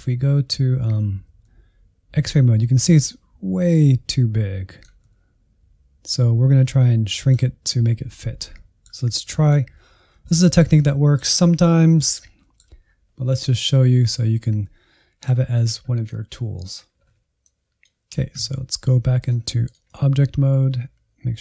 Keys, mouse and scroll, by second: 1.1 alt+z, 1.4-8.0 middle drag, 8.0 alt+z, 8.5 middle click, 9.0-9.3 scroll down 1, 9.3 middle click, 9.9 scroll up 1, 10.3-17.2 shift+middle drag, 17.4-21.4 drag.